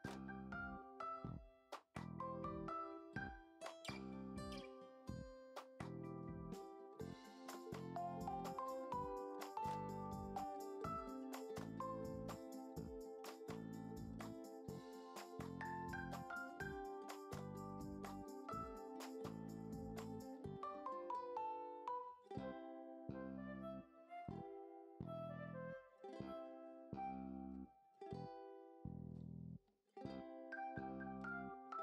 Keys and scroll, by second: 0.0 ctrl+alt+f, 2.0-4.0 typing, 4.5 ctrl+j, 5.6 ctrl+t, 6.6 ctrl+t, 7.8 ctrl+s, 12.0 ctrl+j, 12.4 ctrl+alt+z, 12.9 ctrl+s, 13.1 p, 13.9 BackSpace, 17.7 Return, 17.8-18.6 typing, 29.8 Return, 30.1 ctrl+d, 30.6 ctrl+alt+z, 30.8-31.8 typing.